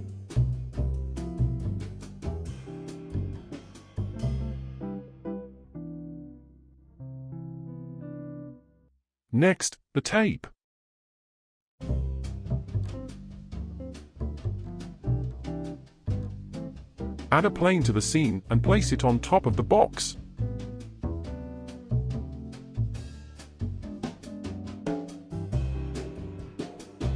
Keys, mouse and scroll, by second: 0.2-5.6 drag, 5.6 space, 8.3 space, 9.3 ctrl+s, 10.1-15.1 middle drag, 15.1-16.6 drag, 16.6-17.4 shift+middle drag, 17.4 shift+a, 22.4 KP_1, 24.5 g.